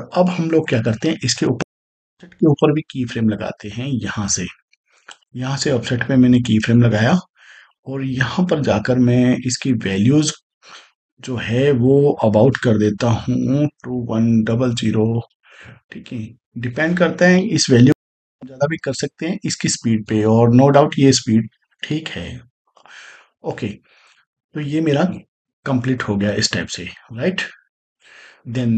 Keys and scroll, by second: 1.4 space, 12.4 2, 13.6-14.5 typing, 17.8 space.